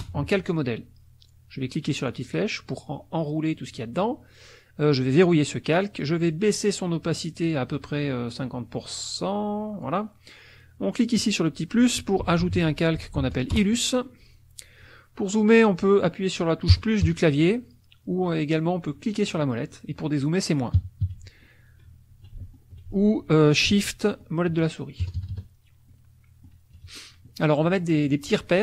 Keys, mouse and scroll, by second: 0.0 Return, 2.0 click, 5.1 click, 7.4 click, 8.1-10.0 drag, 11.1 click, 12.0-13.7 typing, 16.7 KP_Add, 19.0 click, 20.8 KP_Subtract, 22.6 ctrl+shift+click, 24.1 shift+click, 25.0 shift+KP_Add, 25.8 click, 26.7 KP_Subtract, 27.6 click, 28.0 click.